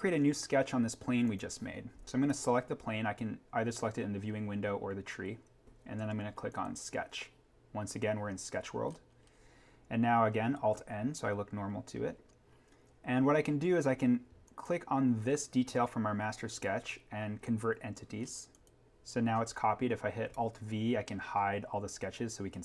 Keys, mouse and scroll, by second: 1.2 click, 6.4 click, 8.9-9.4 scroll up 1, 10.7 alt+n, 11.7-12.1 scroll down 1, 14.4 click, 17.4 click, 18.2 scroll up 1, 18.5 click, 19.1-20.3 scroll down 1, 20.5 alt+v.